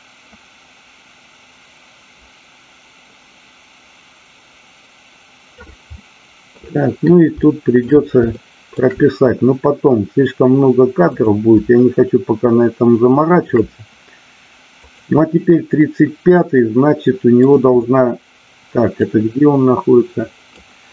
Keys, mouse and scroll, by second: 5.9-6.5 middle drag, 7.3 shift+middle click, 8.2 shift+middle click, 11.2 click, 11.8-13.4 shift+middle drag, 14.7 click, 16.3-17.5 middle drag, 19.0-20.6 drag.